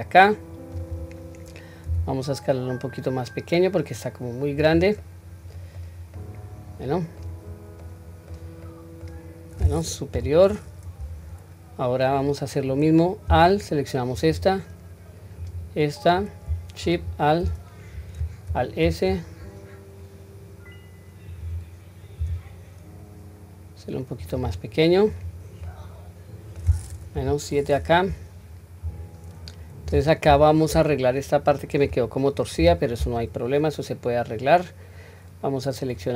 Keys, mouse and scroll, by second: 1.9 s, 5.0 middle click, 6.2-7.2 middle drag, 7.8-8.4 middle drag, 8.6 middle click, 10.1 KP_7, 10.8-11.6 scroll up 1, 14.1 alt+click, 15.4 alt+click, 16.8 alt+shift+click, 18.5 alt+s, 25.0 click, 25.6-26.5 middle drag, 27.1 KP_7, 27.9 scroll down 1, 29.4 scroll down 1, 30.2 q, 32.6 1.